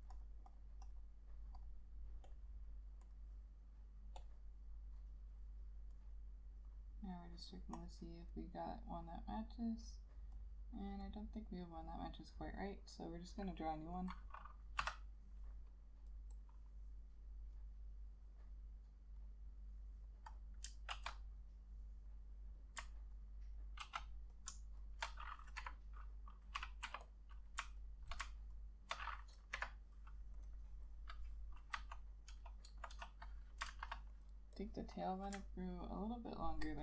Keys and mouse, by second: 0.6 double click, 13.2 double click, 16.0 F7, 16.5 double click, 17.3 double click, 19.2 double click, 21.0 ctrl+z, 23.3 ctrl+click, 25.7 Delete, 27.0 k, 27.9 ctrl+click, 28.7 ctrl+click, 29.7 Delete, 33.8 ctrl+a, 35.8 alt+click.